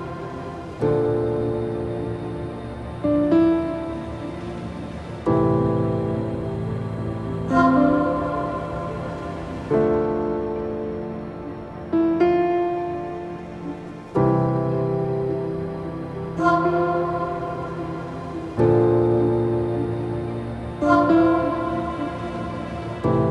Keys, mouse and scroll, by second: 0.7-1.2 scroll up 1, 1.2 click, 1.9 s, 2.9 middle click, 3.2 scroll up 1, 3.5-5.0 middle drag, 5.0-5.4 scroll down 1, 5.4-6.9 scroll up 1, 6.9 shift+click, 7.5 shift+click, 8.3 click, 9.2 click, 9.7 click, 10.3 shift+click, 10.9 g, 13.1-13.4 scroll down 1, 13.4 scroll up 3, 13.7 middle click, 14.5 click, 15.4 click, 15.9 click, 16.7 middle click, 17.1 click, 17.8 shift+click, 18.7 g, 20.2 scroll down 2, 20.4 middle click, 21.1 click, 21.4 scroll down 2, 21.6 middle click, 22.1 click, 23.2-23.3 scroll down 6.